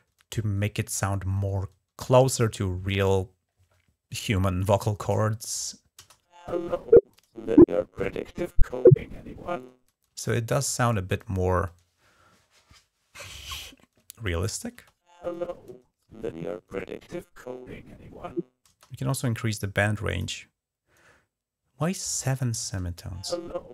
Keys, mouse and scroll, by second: 5.8 space, 9.9 space, 14.2 click, 18.5 space, 19.0-20.0 drag, 22.6 typing.